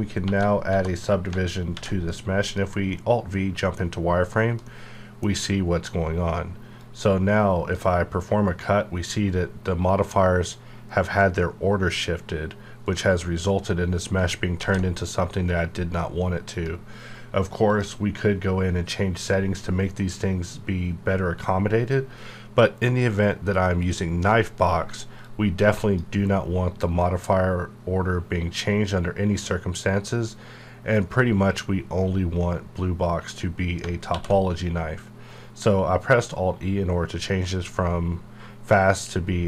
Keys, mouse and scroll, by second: 0.2 ctrl+3, 0.6 ctrl+4, 1.7 alt+v, 2.4 click, 2.9-4.7 middle drag, 4.7-6.7 middle drag, 6.7-10.2 drag, 12.8 right click, 14.6 ctrl+z, 16.4 click, 23.8-28.3 drag, 30.1 scroll down 1, 31.0-32.9 scroll down 1, 33.7 alt+Num_Lock, 33.7 scroll down 1, 34.0 alt+e.